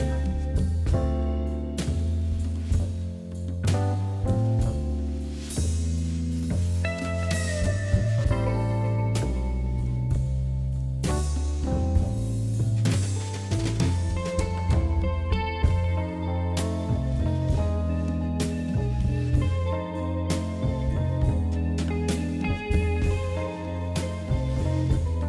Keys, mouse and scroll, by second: 0.4 KP_1, 0.7-1.5 scroll down 6, 1.5 click, 2.0 click, 2.6 Tab, 3.0 click, 3.7-5.3 middle drag, 5.7 KP_1, 6.0-6.5 scroll up 5, 6.8 click, 7.0 Tab, 7.2 scroll up 1, 7.4-8.5 shift+middle drag, 8.5 shift+z, 9.0 1, 9.3 click, 10.3 g, 11.9 shift+z, 12.2 scroll down 2, 12.4 `, 13.5 Tab, 13.7 click, 13.9 scroll down 5, 14.3 shift+middle click, 15.0 scroll up 1, 15.2-16.4 middle drag, 16.4 KP_3, 16.9 KP_1, 17.2 KP_3, 17.7-18.0 scroll up 4, 18.0 shift+middle click, 18.7 Tab, 18.9 scroll down 1, 18.9 middle click, 19.7 scroll up 1, 19.9 scroll down 3, 20.2 middle click, 21.1-22.0 scroll down 1, 22.0-23.1 scroll up 8, 23.6-24.3 scroll down 8, 25.2 Tab.